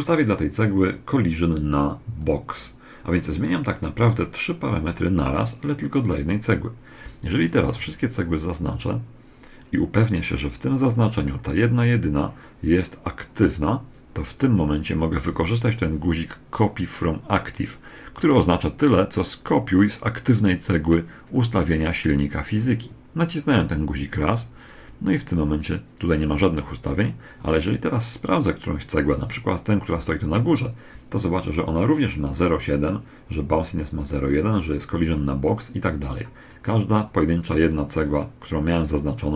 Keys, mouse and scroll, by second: 1.1 click, 7.5 b, 11.6-21.0 middle drag, 21.0 click, 29.7 right click, 35.7-39.3 right drag.